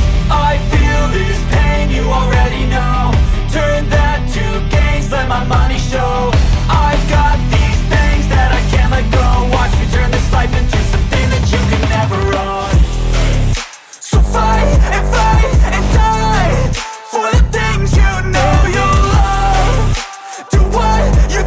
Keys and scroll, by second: 0.0-0.7 typing, 2.4-6.8 typing, 6.5 Tab, 7.0 Tab, 7.8-8.9 typing, 9.0 Up, 9.6 Return, 10.1-14.2 typing, 14.4 Return, 14.7 ctrl+s, 15.2 Down, 15.7 Return, 15.8 Return, 15.9-16.7 typing, 17.6 Return, 18.0 shift+9, 18.4 ctrl+s, 21.2-21.4 typing.